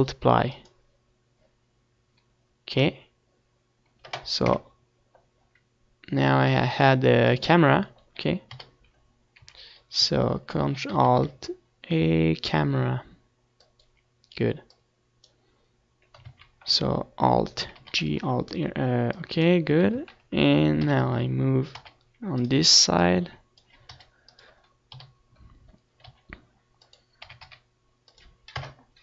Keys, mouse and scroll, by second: 3.7-5.3 drag, 8.3 KP_0, 10.4-12.1 drag, 12.3 KP_7, 13.1 z, 14.7 shift+a, 18.7-20.4 drag, 20.4 ctrl+z, 21.8 alt+r, 22.1 alt+g, 23.1-24.8 drag, 24.0 ctrl+z, 24.8 KP_3, 25.8 r, 26.5-29.0 drag, 27.9 g, 28.9 KP_7.